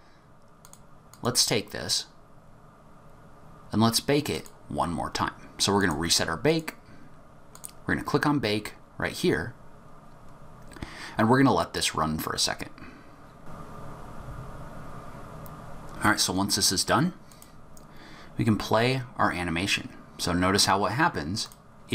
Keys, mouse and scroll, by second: 0.6 click, 1.1 click, 4.3 click, 5.7 click, 7.5 click, 17.2 click, 21.4 click.